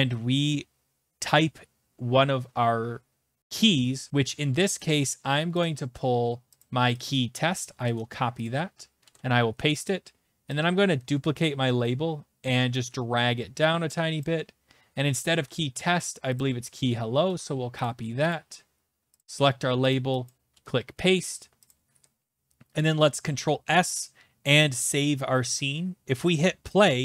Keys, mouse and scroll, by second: 4.8 click, 5.6 click, 6.6 click, 7.0 click, 7.8 ctrl+c, 8.4 click, 9.0 ctrl+v, 10.6 click, 11.2 ctrl+d, 15.2 alt+Tab, 16.3 click, 17.2 ctrl+c, 17.8 click, 18.3 click, 19.2 click, 19.9 click, 20.3 click, 20.5 ctrl+v, 21.7 click, 22.8 ctrl+s, 24.8 click, 26.8 click.